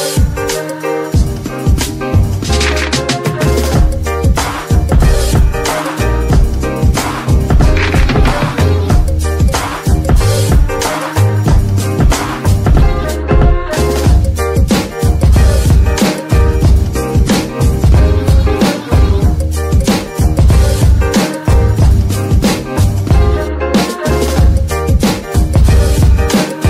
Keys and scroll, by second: 1.7 Escape, 3.1 Tab, 3.7 g, 4.1 Escape, 7.9 g, 8.6 s, 10.0 ctrl+KP_3, 12.8 g, 13.2 Tab, 13.9 s, 14.9 Tab, 17.1 g, 19.4 g, 23.7 z.